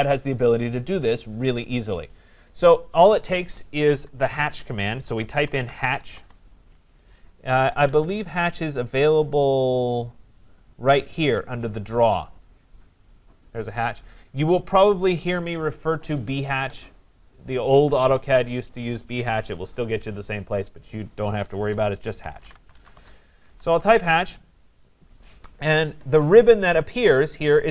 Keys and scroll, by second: 6.1 Return, 7.8 Escape, 22.9 Return.